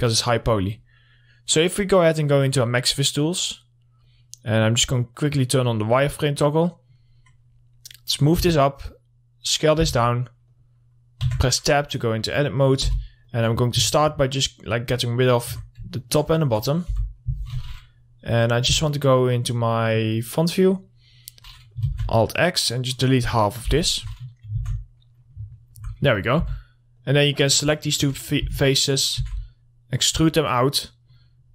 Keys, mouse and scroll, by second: 0.3 middle click, 3.0-7.6 drag, 7.6 middle click, 8.4 click, 8.8 r, 9.3 click, 10.3 w, 10.5-10.9 scroll up 1, 11.0 click, 11.7 Tab, 12.0 middle click, 13.0 3, 13.7 click, 14.4-16.4 alt+middle drag, 16.4 ctrl+click, 17.0 middle click, 20.3 click, 22.3 alt+x, 22.5-25.0 drag, 25.0 alt+x, 25.7 middle click, 26.9 2, 27.4 click, 28.9 w, 29.7 shift+e, 29.9 right click, 30.5 click.